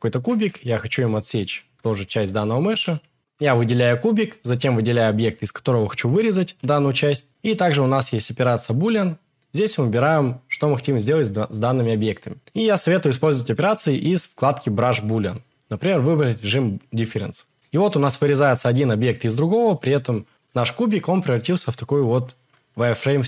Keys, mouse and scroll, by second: 0.1 z, 0.6 click, 1.3 g, 1.5 y, 1.9 click, 16.4 click, 20.3 click.